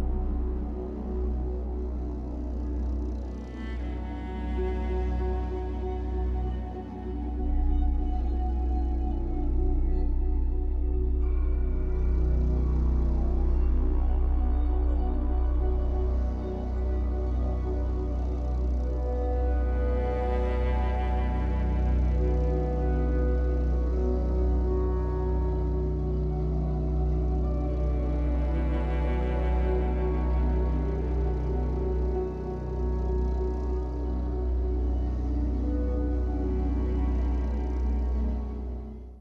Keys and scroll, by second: 7.8 Escape, 8.0 3, 10.0 r, 10.8 alt+x, 16.7 Escape, 21.6 ctrl+s.